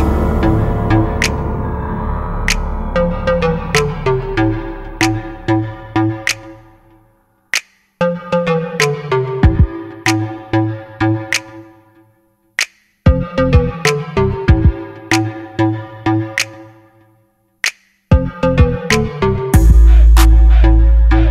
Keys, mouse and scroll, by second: 1.1 KP_7, 6.3 middle click, 7.2-8.4 drag, 9.9 KP_7, 11.5-12.7 drag, 13.1 KP_0, 15.8 right click, 16.7 middle click, 16.8 KP_0.